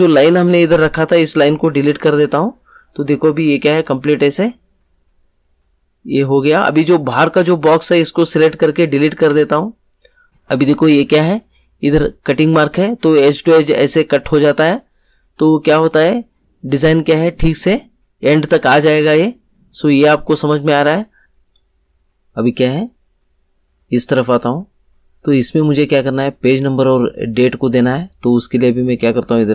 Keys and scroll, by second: 1.8 Delete, 9.2 Delete.